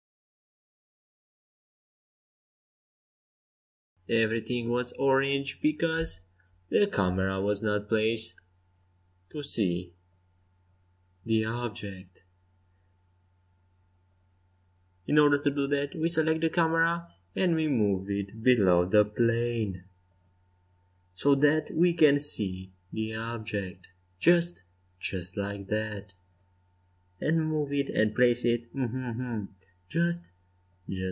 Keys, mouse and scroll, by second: 1.9 middle click, 2.1-6.4 middle drag, 6.4-8.2 drag, 10.0-11.4 right drag, 11.3 KP_0, 11.5-12.7 right drag, 14.4 g, 17.9-19.5 right drag, 18.9-20.6 drag, 22.1-23.9 drag, 22.8 g, 23.8-25.8 middle drag, 24.8 g, 29.8-31.1 drag.